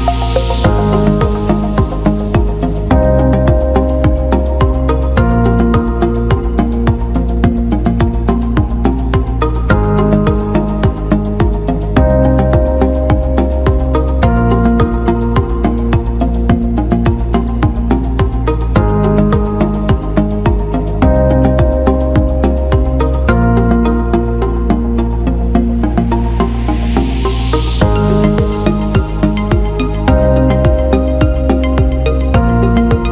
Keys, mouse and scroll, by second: 0.4 ctrl+KP_Add, 4.9-6.9 drag, 7.2 click, 9.0-11.5 drag, 12.6-13.7 drag, 14.5 click, 14.9-17.0 drag, 27.5 click, 31.5-33.1 drag.